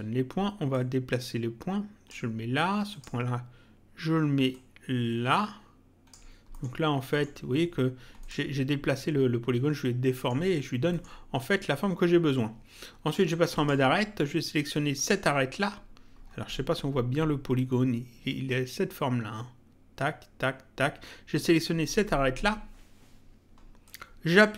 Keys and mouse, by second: 0.7 click, 2.9 click, 4.5 click, 6.5 middle click, 8.2 click, 10.1 middle click, 13.5 click, 14.9 click, 23.8 click.